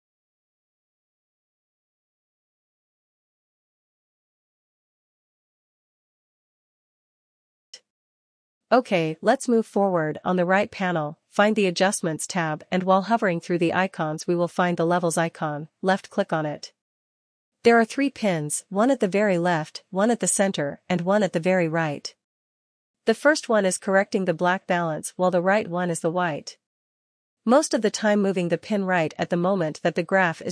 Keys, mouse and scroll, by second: 13.9-19.0 drag, 25.8 click.